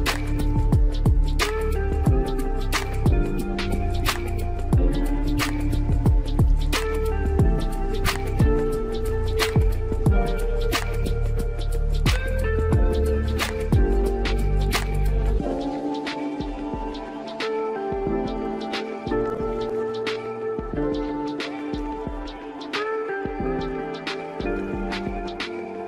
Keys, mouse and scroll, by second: 3.7 KP_Enter, 4.6 click, 5.4 KP_0, 6.3 click, 7.8 KP_7, 9.0 click, 11.6 click, 12.2-14.2 scroll down 1, 14.2 click, 19.5 click, 25.4-25.8 scroll down 1.